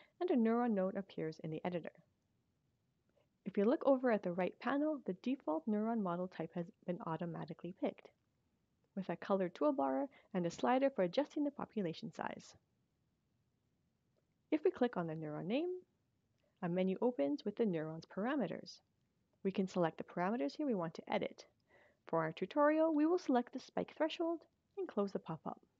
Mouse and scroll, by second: 15.3 click, 23.2 click, 25.2 click.